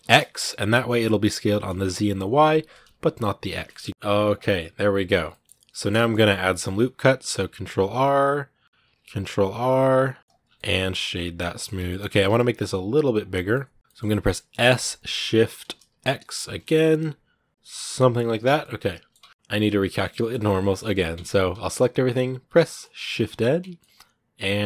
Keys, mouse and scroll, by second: 3.4 scroll down 1, 3.5 middle click, 4.3 middle click, 4.9 scroll up 2, 5.1-6.5 middle drag, 6.5 ctrl+r, 8.6 ctrl+r, 10.1 Tab, 10.2 scroll down 3, 10.3-11.6 middle drag, 11.6 Tab, 11.7 middle click, 11.9 a, 13.3 middle click, 13.8 scroll up 2, 14.1 middle click, 14.5 s, 18.3 scroll down 1, 18.4 middle click, 19.0 Tab, 19.2 scroll down 1, 19.8-20.9 shift+middle drag, 20.9 Tab, 23.2 scroll down 2, 23.4 Tab, 23.6-24.6 middle drag.